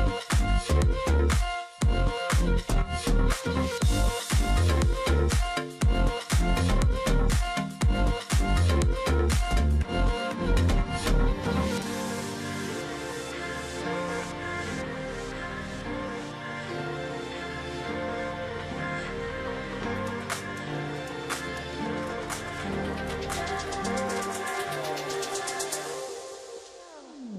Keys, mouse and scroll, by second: 0.3-0.8 alt+scroll up 1, 0.9 space, 1.2-1.6 alt+scroll up 1, 1.6 alt+click, 1.8 alt+scroll down 1, 1.9 space, 3.0 space, 4.2 alt+click, 4.4-5.0 alt+scroll down 1, 5.6-6.1 alt+scroll down 1, 6.6-7.1 alt+scroll up 1, 9.9-10.2 alt+scroll up 1, 10.2 alt+scroll down 1, 10.3 alt+scroll up 1, 10.6 space, 11.1 alt+scroll down 1, 11.8 space, 12.7-13.3 alt+scroll down 2, 15.4 alt+scroll up 1, 15.7 space, 19.5 alt+scroll up 1, 21.7-22.3 alt+scroll down 1, 24.5-25.0 alt+scroll down 1, 26.6 ctrl+z.